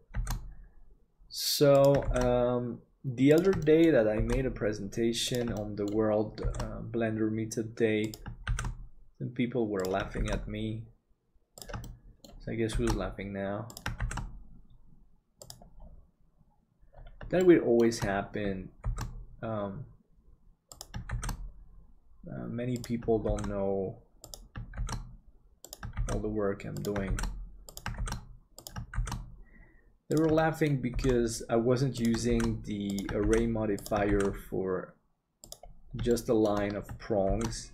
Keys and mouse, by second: 3.7 middle click, 5.6 middle click, 11.8 shift+middle click, 17.5 shift+middle click, 18.8 shift+d, 30.4 shift+middle click, 36.2 middle click, 37.2 shift+d.